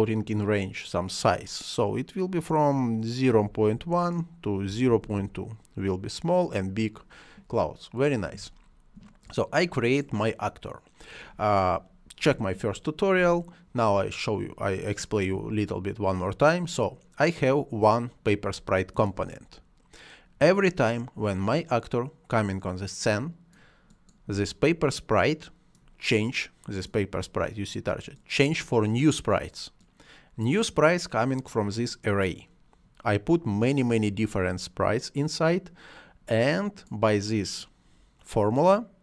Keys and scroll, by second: 3.2-5.3 typing.